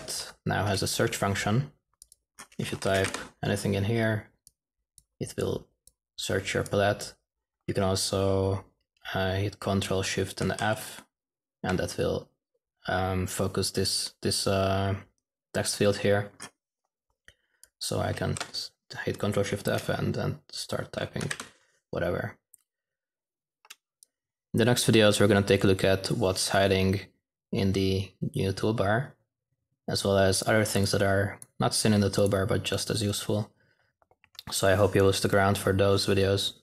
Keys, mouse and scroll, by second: 2.1-2.7 drag, 2.4-3.9 typing, 4.9-7.9 drag, 10.4 ctrl+shift+f, 19.0 f, 21.0-22.4 typing, 24.0 -, 31.3-33.9 drag.